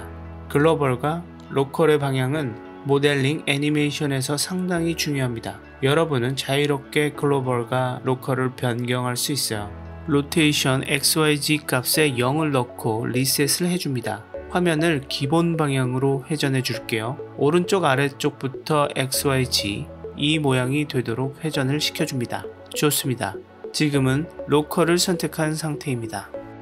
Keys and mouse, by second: 1.1 click, 1.2 click, 7.8 click, 10.6-12.1 drag, 15.0-18.9 drag.